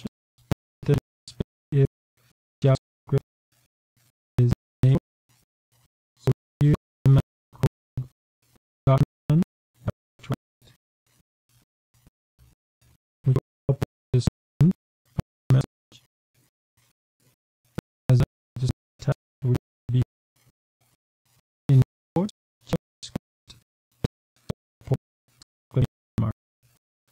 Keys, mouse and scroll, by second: 0.0-4.3 typing, 5.7-8.0 typing, 9.1-14.5 typing, 15.8 Return, 16.3-20.5 typing, 22.0-27.1 typing.